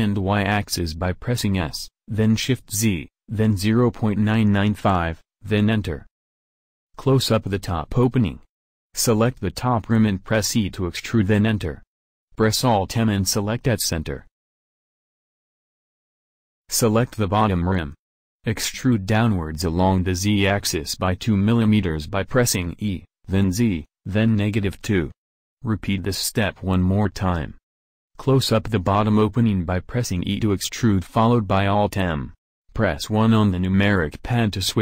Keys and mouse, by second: 3.4-4.5 middle drag, 4.5 Tab, 5.3 Tab, 5.6 a, 7.2-8.7 a, 9.0 middle click, 11.2 e, 12.7 alt+m, 17.6 a, 20.7 e, 22.6 e, 24.8-29.7 drag, 28.6 e, 30.0 alt+m, 31.8 KP_1, 32.9-34.5 middle drag.